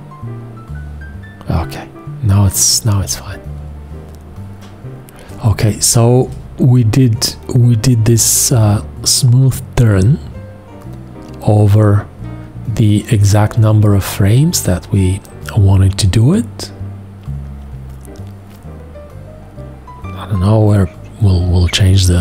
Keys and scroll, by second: 5.4 space.